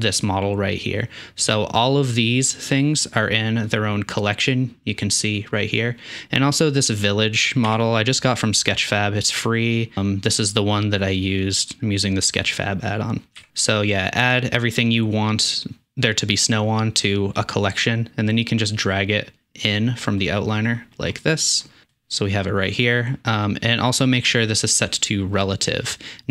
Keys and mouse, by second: 2.6 click, 3.7-7.2 drag, 7.7 n, 13.4 n, 18.4 click, 19.7 click, 24.8-26.3 drag.